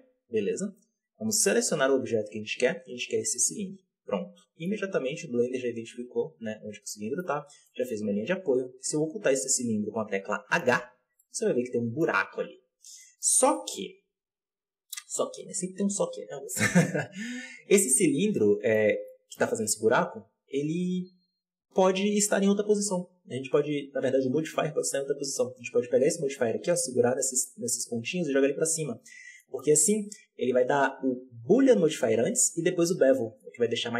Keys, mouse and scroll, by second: 1.8 click, 4.2-4.6 scroll down 2, 4.6-7.3 middle drag, 7.3 scroll up 1, 7.5 shift+middle drag, 7.8-8.3 scroll up 2, 8.3 right click, 10.6 h, 11.1-12.2 middle drag, 12.2 ctrl+z, 12.6 scroll down 1, 12.9-13.7 shift+middle drag, 13.7-15.3 scroll down 4, 15.3 right click, 17.9-18.2 scroll up 1, 18.2-25.9 middle drag, 25.9-28.9 drag, 28.9-29.3 scroll up 3, 29.3 shift+middle drag, 29.5-31.2 scroll up 3, 33.6-33.9 scroll down 1.